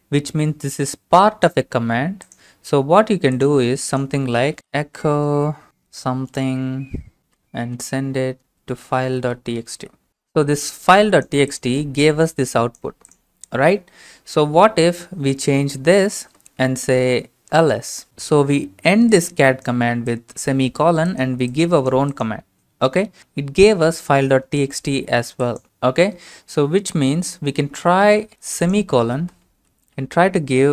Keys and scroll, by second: 4.3-10.3 typing, 5.8 Right, 15.9-18.4 typing, 23.2 Return, 27.9 alt+Tab, 29.7 ;.